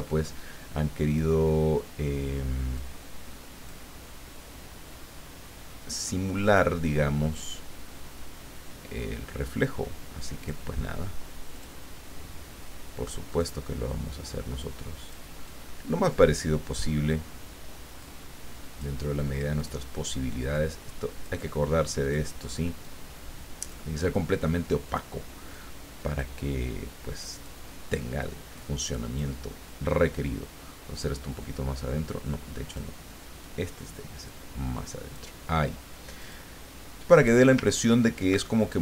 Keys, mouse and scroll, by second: 0.1 alt+Tab, 1.1 click, 2.7-4.2 drag, 6.4 click, 7.3 click, 9.0-10.7 drag, 11.5 click, 13.3 click, 14.6 click, 15.5-17.0 drag, 18.0-19.3 drag, 19.5 click, 20.5-21.8 drag, 22.0 click, 22.8-24.0 drag, 24.8 click, 25.5-26.8 drag, 27.3 click, 28.5-29.7 drag, 30.2-32.9 drag, 33.4-36.5 drag, 37.0 scroll down 2, 37.1 scroll up 2, 37.3-38.5 scroll down 5, 38.5 ctrl+click.